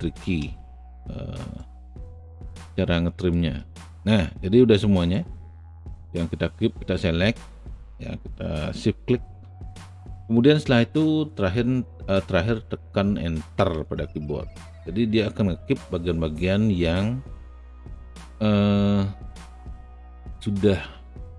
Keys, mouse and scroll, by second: 1.6 alt+right click, 2.5-3.6 alt+drag, 3.6-4.7 alt+middle drag, 4.7 alt+click, 5.3-6.4 alt+right drag, 13.6 Return, 20.4 alt+middle click.